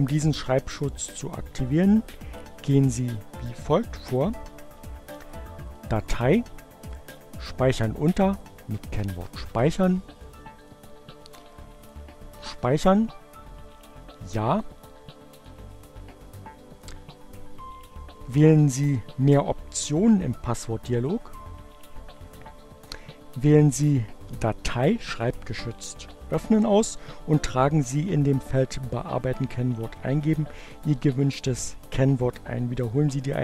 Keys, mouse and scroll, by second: 4.7 click, 6.2 click, 9.4 click, 10.7 click, 13.0 click, 19.7 click, 23.4 click, 33.2 click.